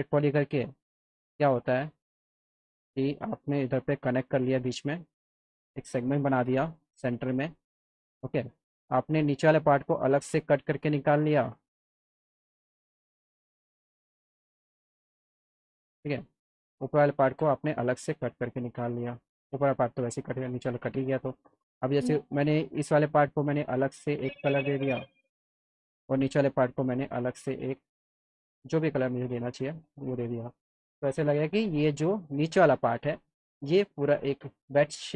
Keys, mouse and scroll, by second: 0.5 click, 1.2 click, 2.1 click, 3.6 click, 4.4 alt+middle click, 6.5 F3, 6.7 F4, 6.9 F3, 7.4 F3, 8.5 click, 9.2 click, 9.9 middle click, 11.1 click, 11.9 click, 13.1 click, 14.1 click, 15.1 click, 15.9 click, 16.7 click, 18.1 click, 20.0 click, 20.5 click, 21.0 click, 22.2 click, 24.0 click, 24.8 click, 25.5 click, 25.9 click, 26.4 ctrl+click, 27.9 click, 29.0 click, 29.5 click, 31.7 F3, 32.4 click, 34.5 click.